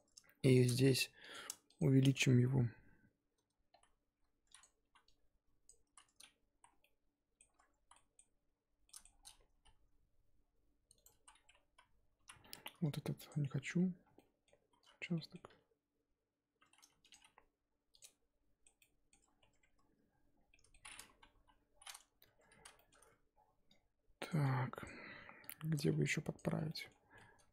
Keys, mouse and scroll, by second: 0.5 alt+shift+click, 1.3 alt+click, 1.8 alt+shift+click, 2.8 ctrl+KP_Add, 4.6 z, 5.6 click, 5.9 z, 6.6 z, 6.8-7.8 middle drag, 7.8 z, 7.9-9.2 middle drag, 9.2-9.5 scroll down 1, 9.5 s, 11.2 z, 11.4-12.4 scroll up 2, 12.4 1, 13.8-14.1 scroll up 2, 14.1 middle click, 14.6 z, 15.0 scroll down 1, 15.1 middle click, 15.5 s, 17.1 g, 18.0-19.2 middle drag, 19.2 scroll up 2, 19.4 Tab, 20.3 scroll down 3, 20.5 middle click, 21.3 KP_3, 21.7-22.2 scroll up 2, 22.2 Tab, 22.6 z, 22.7 shift+middle click, 22.9-23.2 scroll up 4, 24.3 click, 24.8 click, 26.3 ctrl+click, 26.7 middle click, 27.1 z, 27.1-27.5 middle drag.